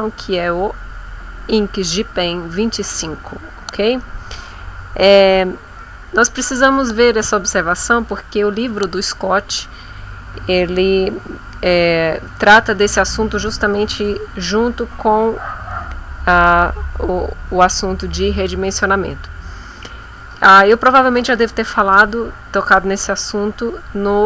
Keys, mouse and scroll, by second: 7.2 click.